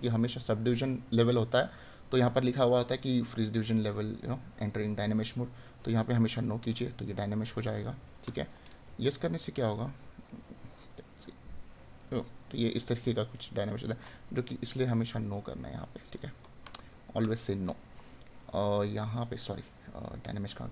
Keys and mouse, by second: 7.2 right click, 12.2 right click, 16.2 right click, 18.1 right click.